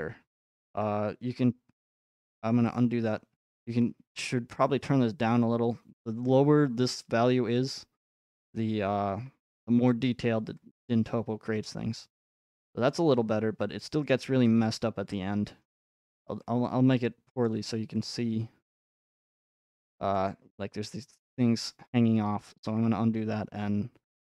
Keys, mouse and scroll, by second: 0.6 shift+middle click, 2.8 click, 8.2 click, 12.9 click, 13.3 scroll, 15.1 click, 16.1 ctrl+z, 17.4 click, 18.7 click, 20.1 click, 20.8-22.2 drag.